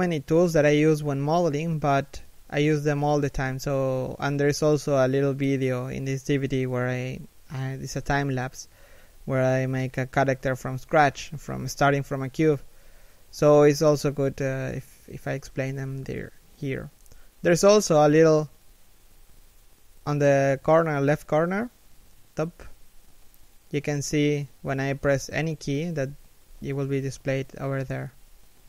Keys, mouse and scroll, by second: 1.9 a, 3.6 x, 7.8 KP_7, 10.5 shift+middle click, 11.2 c, 11.6 shift+middle click, 14.7 shift+middle click, 17.5 shift+middle click, 20.0 shift+middle click, 21.5 shift+middle click, 25.5 1, 26.6 7.